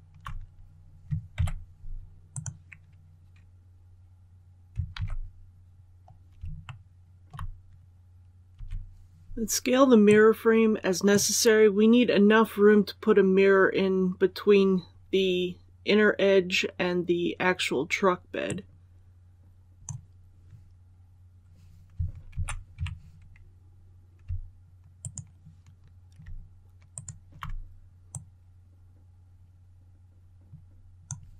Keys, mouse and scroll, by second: 1.3 ctrl+e, 2.2 click, 4.8 alt+a, 5.4 scroll down 1, 6.6 shift+middle click, 7.9 click, 8.4 l, 9.9-20.3 drag, 22.2 alt+a, 22.7 alt+a, 24.9 alt+right click, 26.8 alt+shift+right click, 28.0-31.3 drag.